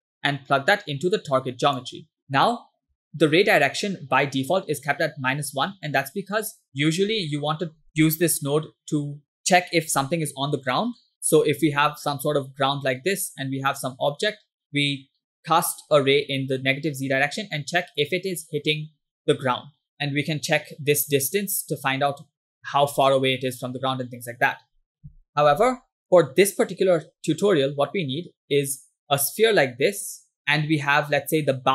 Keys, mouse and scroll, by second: 2.2 scroll up 3, 3.1 shift+middle click, 3.4-4.7 scroll up 3, 7.4-7.8 shift+middle drag, 11.2 e, 11.9-13.1 drag, 13.9 click, 16.0 click, 16.9 click, 18.7 click, 20.9 click, 21.3 click, 25.2 ctrl+click, 29.0-30.0 drag.